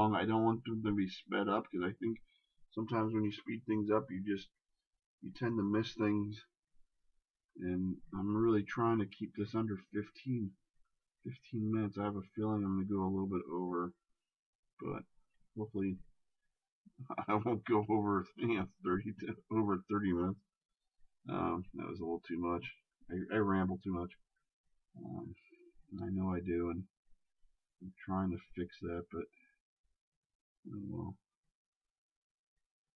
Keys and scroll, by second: 6.0 shift+space, 10.9 ctrl+z, 22.0 shift+space, 24.5 shift+space.